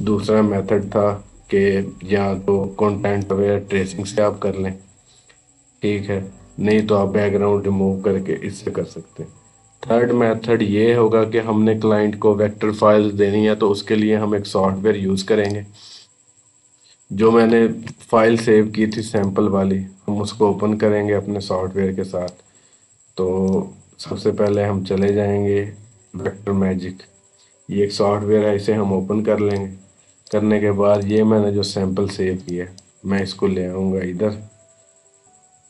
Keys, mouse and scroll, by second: 3.0 ctrl+d, 3.1 right click, 6.2 click, 15.3 click, 17.3 ctrl+z, 18.7 click, 23.3 right click, 24.3 click, 29.3-35.6 drag.